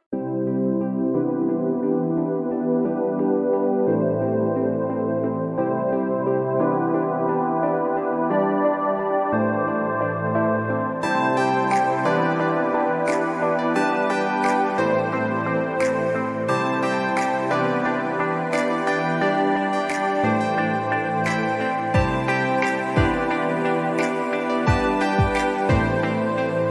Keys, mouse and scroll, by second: 0.1 scroll up 1, 1.0-1.4 scroll up 2, 1.4 scroll down 1, 1.8 scroll up 1, 2.2-2.8 scroll down 1, 4.6 scroll down 1, 5.4 alt+scroll up 1, 6.5-8.1 drag, 8.1 ctrl+z, 8.6-9.4 typing, 9.6-10.9 drag, 10.9 ctrl+z, 11.4-15.6 typing, 12.3 click, 13.6 click, 14.6 click, 16.5 click, 17.2 ctrl+a, 18.4 alt+scroll down 1, 19.0 click, 19.9 ctrl+a, 22.5 click, 24.8 ctrl+Num_Lock, 24.8 click, 25.0 ctrl+z, 25.2 alt+scroll up 1, 25.5 scroll down 1, 26.1-26.7 drag.